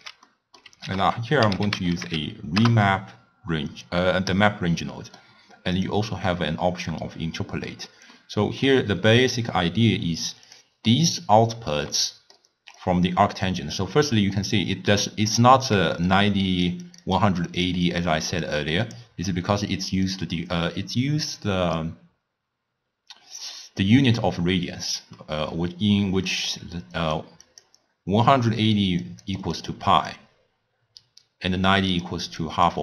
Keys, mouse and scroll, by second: 0.0-0.1 typing, 0.3 middle click, 0.9 ctrl+a, 5.0-6.1 middle drag, 6.1 click, 8.2-9.3 middle drag, 9.3-10.6 drag, 12.0-12.8 middle drag, 12.8 click, 15.7-19.1 typing, 16.1 click, 16.9 click, 17.5 click, 17.9 click, 18.6 click, 20.1-23.1 drag, 25.2-25.7 middle drag, 25.7-32.8 typing, 26.3 middle click, 27.0 click, 27.5 click, 29.1 click, 29.4 click, 29.7-30.2 drag, 32.0 click, 32.3 click, 32.7 click.